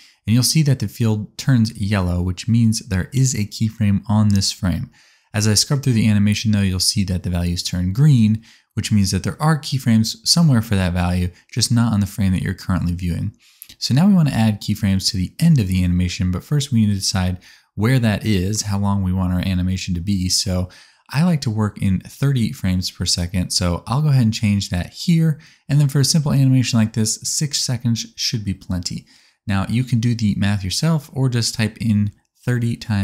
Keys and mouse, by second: 20.6-23.7 middle drag, 23.7-33.0 drag.